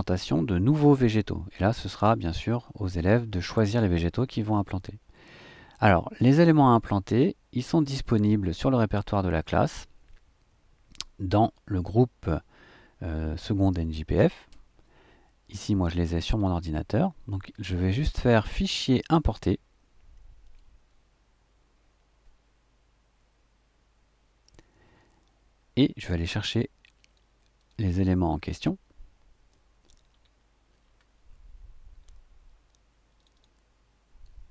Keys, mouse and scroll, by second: 18.3 click, 20.4 click, 26.5 click, 27.6-27.9 drag, 30.1-30.8 scroll down 1, 30.8-31.1 scroll up 1, 31.1-32.0 scroll down 1, 33.1 click.